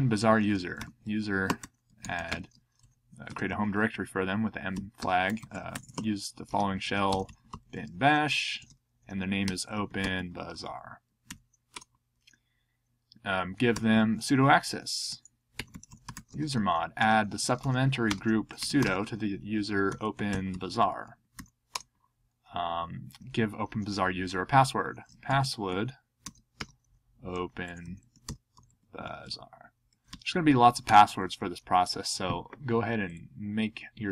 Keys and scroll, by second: 0.5-3.2 typing, 4.5-11.3 typing, 13.5-16.5 typing, 19.6-21.5 typing, 24.8-30.4 typing, 30.8 Return.